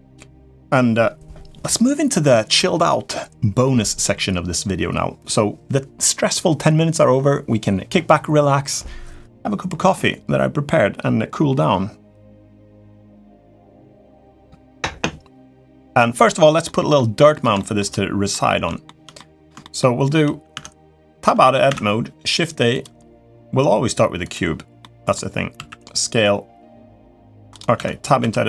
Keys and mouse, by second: 16.4 middle click, 17.3 shift+middle click, 18.1 middle click, 18.4 shift+middle click, 18.9 middle click, 19.4 shift+middle click, 20.3 Tab, 21.4 shift+a, 24.6-24.9 middle drag, 25.3 s, 27.5 Tab, 28.0 a, 28.2 s.